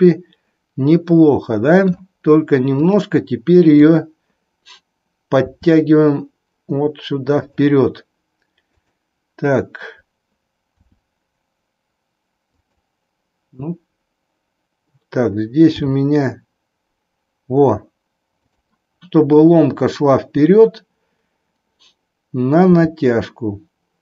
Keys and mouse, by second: 0.1 middle click, 0.7-2.0 middle drag, 2.7-3.7 drag, 3.7 KP_3, 5.5 r, 8.7-9.8 drag, 10.7 r, 15.8 g, 22.6 g.